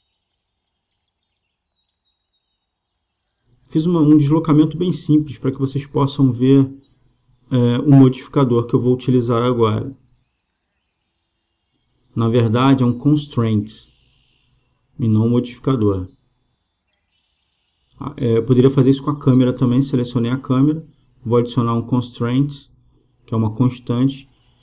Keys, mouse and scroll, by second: 6.8-10.3 drag, 17.2-19.0 right drag, 22.3-24.6 drag.